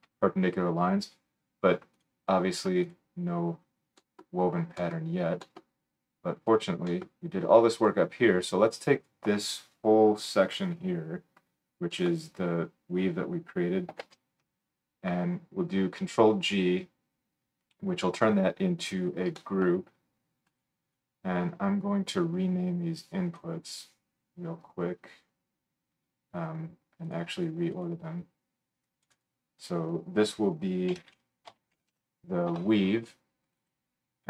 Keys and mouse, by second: 2.0-2.8 drag, 2.8 middle click, 2.9-3.8 drag, 3.8-5.8 right drag, 5.8-13.3 drag, 6.5 middle click, 6.5 right click, 7.8-15.5 middle drag, 7.8-13.3 right drag, 14.0 ctrl+g, 18.9-20.6 middle drag, 20.6 click, 20.8 middle click, 20.9-27.0 drag, 27.0 middle click, 27.1 click, 29.0 click, 33.5 click.